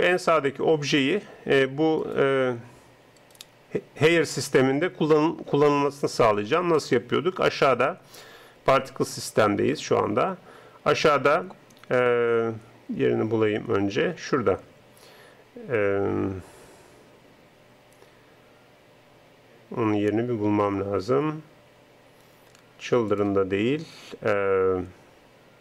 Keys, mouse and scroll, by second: 0.1-4.8 right drag, 23.1-25.6 drag.